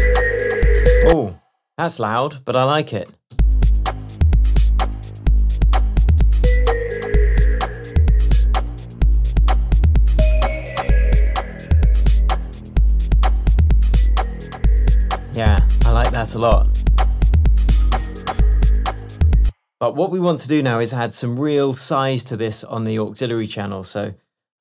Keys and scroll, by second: 19.5 space, 22.2 Tab.